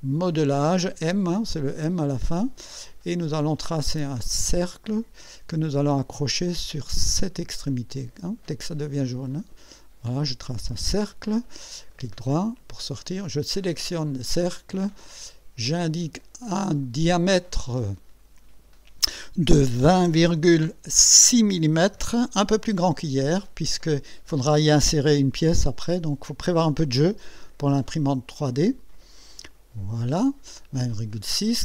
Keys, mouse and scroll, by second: 4.3 click, 9.1 click, 10.7 click, 11.9 right click, 13.6 click, 15.7 click, 17.7 click, 19.6-20.8 typing, 22.0 6, 29.2 click.